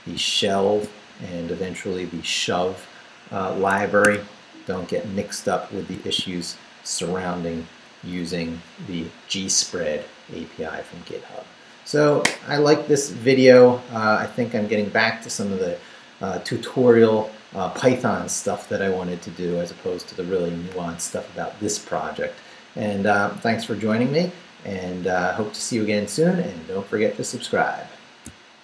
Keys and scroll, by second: 0.6 shift+v, 0.9 shift+Down, 3.7 Escape, 4.4 Down, 5.9 shift+Down, 6.0 shift+v, 6.3 shift+Down, 7.2 Down, 8.0 Down.